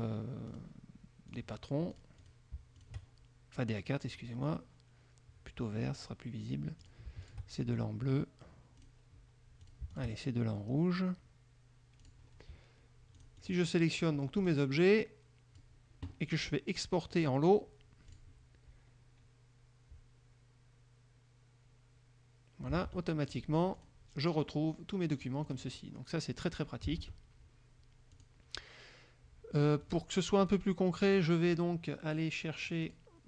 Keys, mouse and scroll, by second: 0.6 click, 1.4 click, 2.1 click, 3.0 shift+click, 4.2 click, 6.1 click, 7.0 click, 7.4 shift+click, 9.0 click, 9.8 shift+click, 12.2 click, 13.4-14.1 drag, 14.2 middle click, 14.6 click, 15.0-15.9 drag, 17.3 click, 18.3 click, 23.1 alt+Tab, 23.5 alt+click, 24.0 alt+click, 24.6-25.9 drag, 27.2 alt+Tab, 28.3 click, 30.0 click, 30.6 click, 31.2 click, 33.0 click.